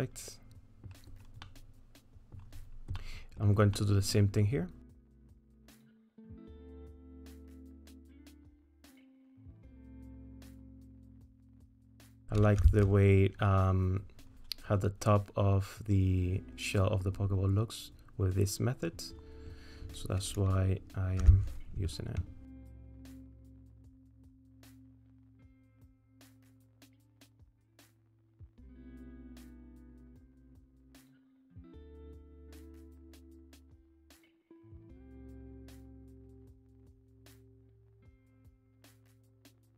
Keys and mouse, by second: 0.2 middle click, 1.4 middle click, 3.0 middle click, 3.8 middle click, 6.3-9.0 drag, 9.3-10.6 drag, 10.8 middle click, 11.5 shift+middle click, 12.6 3, 21.2 w, 22.5 alt+click, 23.1 click, 23.6 middle click, 24.0-28.2 drag, 28.9 shift+click, 30.4 ctrl+KP_Add, 31.5 click, 31.8 middle click, 32.1 middle click, 32.8 middle click, 33.8 alt+click, 34.5 2, 34.8 alt+click, 36.1 click, 37.0 middle click, 37.4 middle click, 37.7 ctrl+z, 37.9 middle click, 38.8 middle click, 39.6 alt+shift+click.